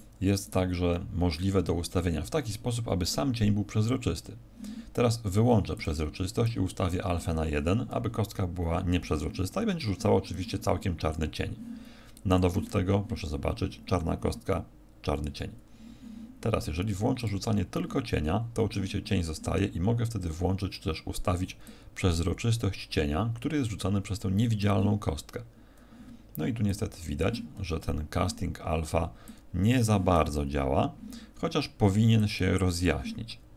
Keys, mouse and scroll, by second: 0.4 right click, 5.7 click, 6.4 click.